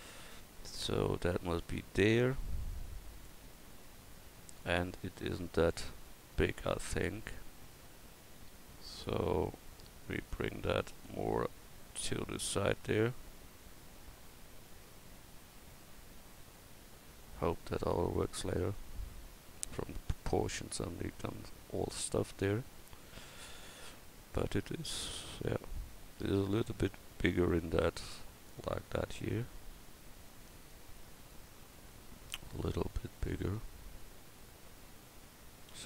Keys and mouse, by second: 6.3 Tab, 13.5 Tab, 35.7 s.